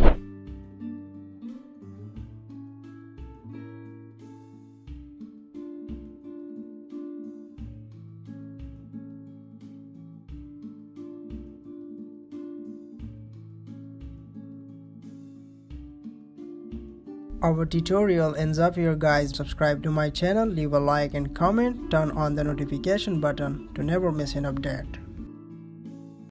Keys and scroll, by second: 11.7 Down, 16.1 ctrl+/, 16.1 ctrl+s.